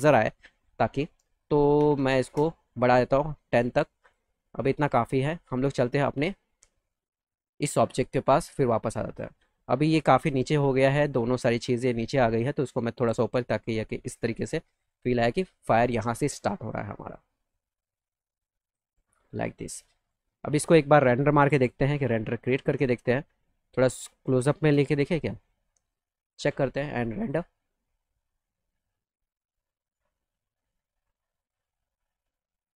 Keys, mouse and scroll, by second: 1.7 KP_1, 1.9 KP_0, 2.1 KP_Enter, 3.5 click, 3.9 click, 4.3 middle click, 4.6 alt+middle click, 6.0 click, 6.7 alt+middle click, 7.8-8.9 middle drag, 9.1 alt+middle click, 10.1 ctrl+click, 10.9 middle click, 11.3 middle click, 12.4-14.4 drag, 14.7 scroll up 2, 15.0 alt+middle click, 15.9 alt+middle click, 17.4-18.6 drag, 19.0 alt+middle click, 19.9 middle click, 22.3 click, 22.7 middle click, 23.4 middle click, 23.7 middle click, 24.6 shift+f, 25.1 ctrl+alt+middle click, 27.1 click, 31.5 click.